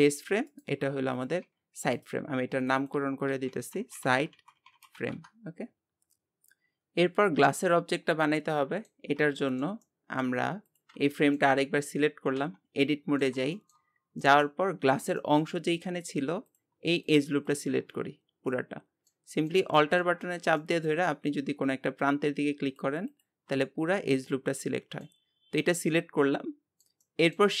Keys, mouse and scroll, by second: 0.1 g, 1.2 click, 1.5 g, 2.6-6.2 drag, 6.4-9.1 shift+middle drag, 9.1 scroll up 1, 9.4-10.7 shift+middle drag, 10.7 click, 11.1-12.4 shift+middle drag, 12.4 Tab, 12.8-13.9 middle drag, 13.9-14.2 scroll up 1, 14.2 middle click, 14.8-15.2 scroll up 3, 15.2 shift+middle click, 15.6-16.4 scroll up 1, 16.4-17.9 drag, 17.9-18.5 scroll down 4, 18.5-20.2 middle drag, 20.2-20.6 scroll up 4, 20.6 shift+middle click, 21.1 scroll up 2, 22.6 alt+click, 23.6 scroll down 5, 24.3-27.6 middle drag.